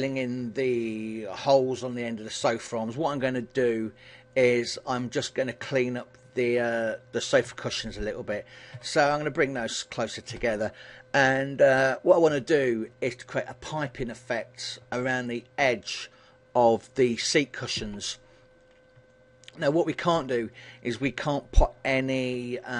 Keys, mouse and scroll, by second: 4.4 click, 4.9 b, 7.6 g, 10.4 click, 11.9 a, 19.2 middle click, 20.1-20.5 scroll up 3.